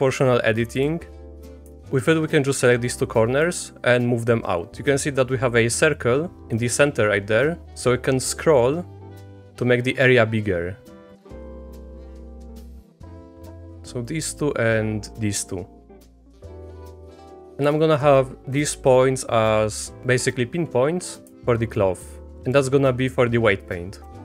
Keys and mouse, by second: 0.8 click, 3.5-12.2 drag, 12.5 click, 12.7 middle click, 13.5 middle click, 14.1-16.2 drag, 16.4 Tab, 16.6 click, 16.8 click, 17.4 click, 17.8 shift+click, 18.5 Tab, 20.0 click, 21.7 click, 22.1 click, 24.1 Tab.